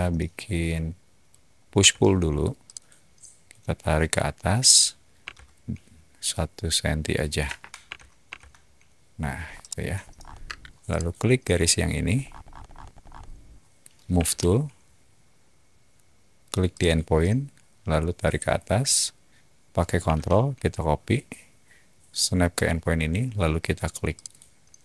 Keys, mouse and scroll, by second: 1.7 p, 1.8 p, 2.6 click, 5.2 2, 7.5 BackSpace, 7.8 1, 8.2 Return, 9.4 middle click, 9.4 scroll, 10.0 middle click, 10.0 scroll, 10.4 space, 10.9 click, 12.1 middle click, 12.2 scroll up 2, 12.4 middle click, 12.6 middle drag, 12.8 middle click, 14.1 m, 16.7 click, 17.4-18.2 typing, 24.1 click, 24.4 typing.